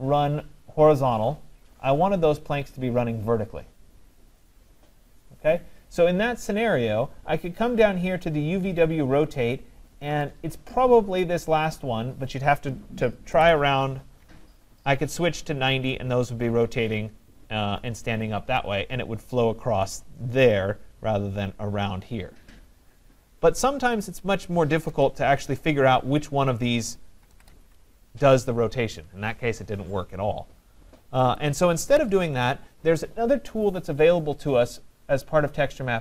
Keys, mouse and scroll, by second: 10.3 click, 13.3-14.8 typing, 18.6 right click, 24.2 click, 24.9-25.9 typing, 26.6 click, 27.0-27.8 typing, 31.4 click, 32.0 typing, 32.2 Tab, 34.9-36.0 drag.